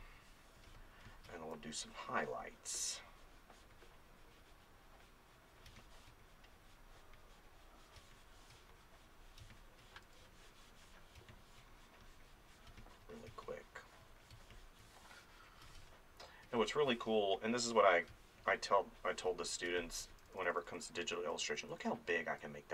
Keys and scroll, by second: 5.7 space, 8.0 space, 10.0 space, 11.2 space, 18.1 space, 20.2 [, 22.2 [.